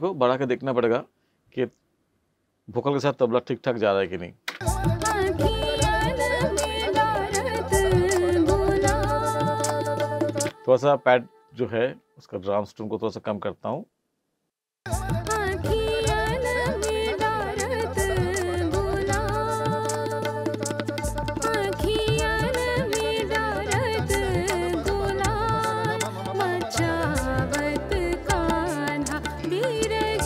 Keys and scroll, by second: 4.5 space, 10.4 space, 14.7 space.